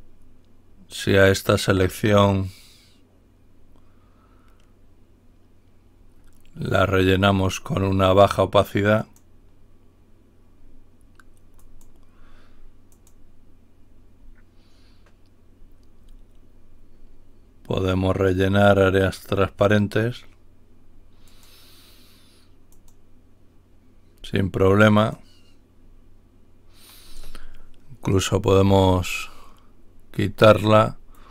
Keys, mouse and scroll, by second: 9.0 click, 11.5 click, 12.9 click, 21.1 click, 22.7 click, 24.9 click, 28.6 Delete.